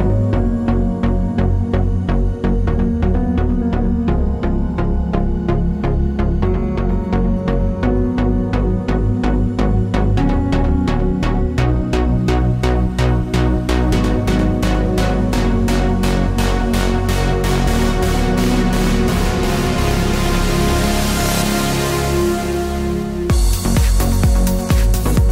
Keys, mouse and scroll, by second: 0.4 z, 1.2 alt+click, 2.0 alt+click, 2.7 alt+shift+click, 3.1 alt+shift+click, 3.4 alt+shift+click, 3.8 alt+shift+click, 4.1 alt+shift+click, 5.3 alt+shift+click, 5.7-7.8 middle drag, 6.6 s, 7.8-10.9 drag, 8.6 s, 11.0-14.0 middle drag, 11.3 scroll down 1, 14.0 alt+click, 14.6 alt+shift+click, 14.9 alt+shift+click, 15.3 alt+shift+click, 15.6 alt+shift+click, 15.9 alt+shift+click, 16.1 alt+shift+click, 16.4 s, 17.1-22.6 middle drag, 18.0 Tab, 20.6 shift+a, 21.5 s, 22.6 click, 22.8-24.8 middle drag, 23.1 scroll down 2, 23.7 s, 24.8 click.